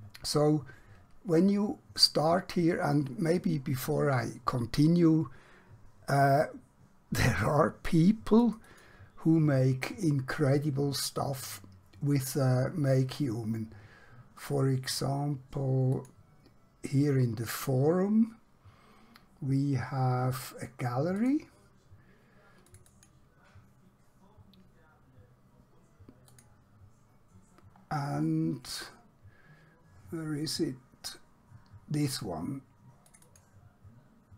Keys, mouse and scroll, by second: 8.4 click, 15.9 click, 19.7-20.8 scroll down 1, 21.2 click, 26.3 click, 27.9-29.0 scroll down 1, 33.0 click.